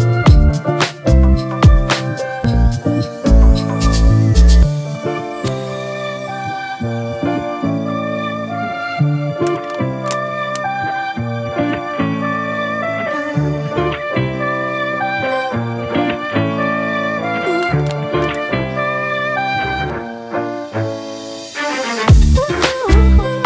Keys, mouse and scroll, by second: 0.8 space, 5.4 alt+BackSpace, 6.6 ctrl+d.